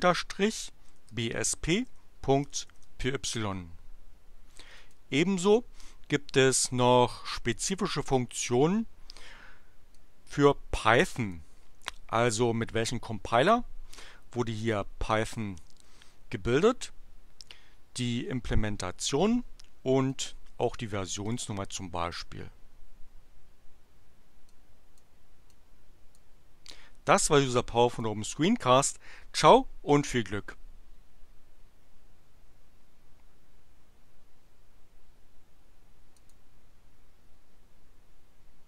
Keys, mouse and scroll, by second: 0.0-3.0 typing, 4.8 click, 9.7-11.5 drag, 20.0 click, 21.3 click, 22.2 click, 24.5 click, 25.4 click, 26.6 click, 27.8 click, 36.2 click.